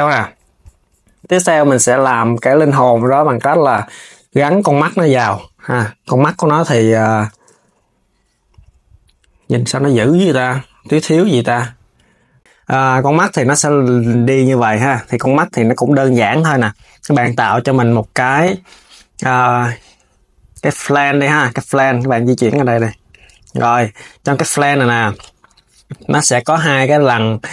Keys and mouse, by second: 1.1 s, 4.2 s, 6.6 s, 7.1 KP_1, 9.1 s, 10.0 KP_3, 11.9 s, 12.0 s, 14.5 s, 16.2 KP_7, 17.0 shift+a, 23.9 Tab, 25.8 click.